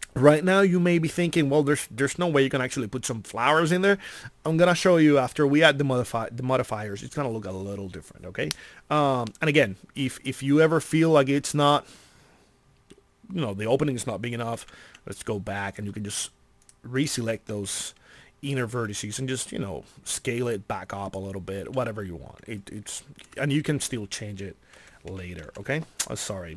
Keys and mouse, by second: 14.6 ctrl+z, 18.7 s, 21.1-22.1 drag, 24.7 r.